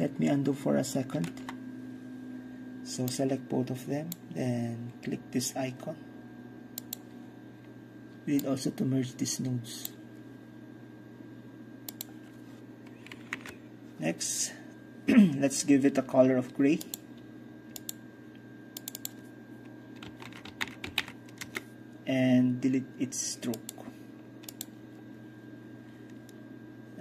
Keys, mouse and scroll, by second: 1.2 ctrl+z, 3.2-5.9 ctrl+drag, 6.8-10.9 drag, 12.0 click, 13.4 ctrl+KP_9, 16.9-19.2 drag, 19.0 middle click, 19.2 middle click, 19.9 click, 20.1-21.0 typing, 21.5 Return, 23.6-27.0 drag.